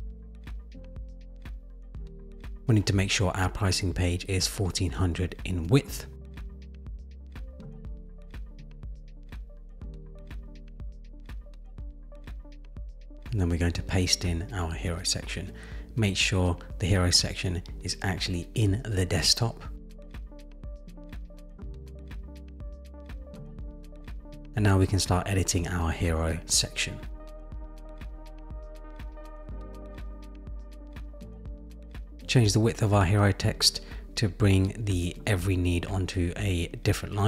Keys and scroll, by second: 6.8 Return, 14.0 super+v, 33.1 shift+Down, 33.9 shift+Down.